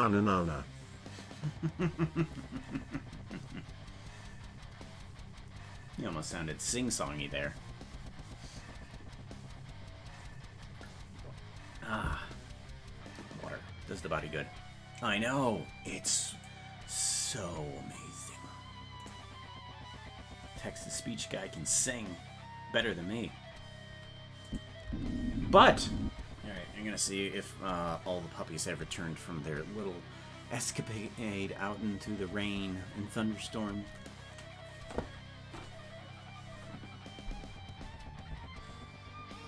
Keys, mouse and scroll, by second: 24.5 click, 24.8 space.